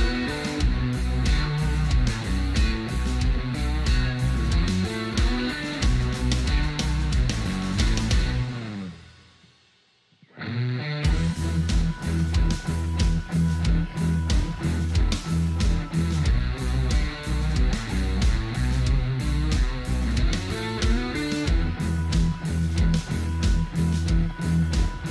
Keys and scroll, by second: 24.8 ctrl+alt+space.